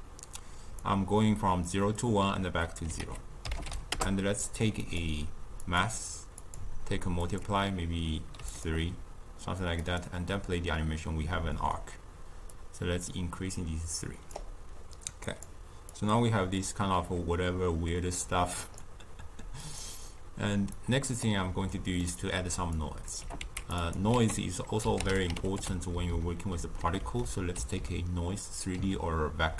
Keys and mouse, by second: 2.9 ctrl+a, 5.6-8.6 drag, 9.7-20.8 drag, 22.0-22.7 middle drag, 22.7-23.1 drag, 23.1 g, 23.8 click, 24.1 ctrl+a, 26.0 Down, 27.1 Up, 27.7 Down.